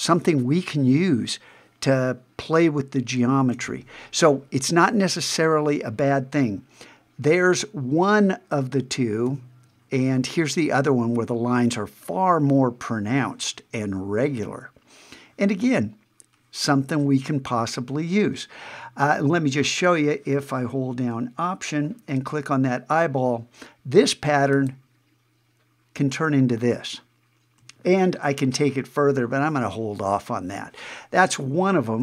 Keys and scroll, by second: 9.3 super+`.